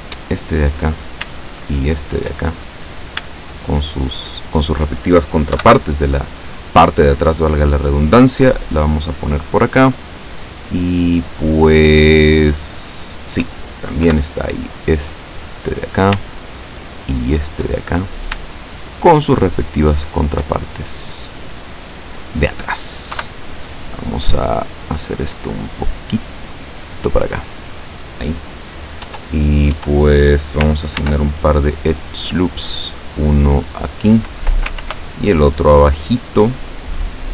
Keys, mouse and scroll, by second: 0.4 right click, 1.9 shift+right click, 2.5 shift+middle click, 3.5 shift+right click, 4.5 shift+right click, 5.6 KP_7, 7.1-8.8 drag, 10.1-13.5 middle drag, 14.1 KP_7, 15.6 right click, 17.3 shift+right click, 17.8 shift+middle click, 19.0 shift+right click, 20.0 shift+right click, 20.7-22.8 shift+middle drag, 23.2 KP_7, 25.2-27.5 drag, 29.1 Tab, 29.8 Tab, 31.1 ctrl+r, 31.8 click, 33.5 click, 34.9 ctrl+r, 35.3 ctrl+click, 36.9 click.